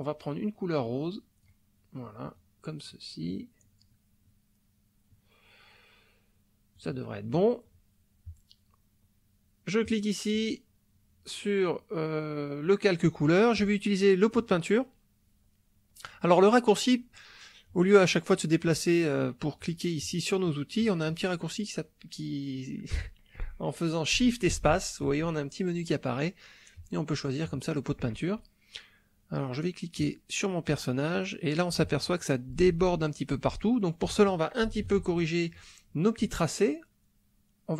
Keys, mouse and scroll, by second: 0.9 click, 2.3-7.0 drag, 9.9 click, 19.6 click, 20.0 click, 20.5 click, 24.5 shift+space, 26.8 click, 30.0 click, 34.8 ctrl+z.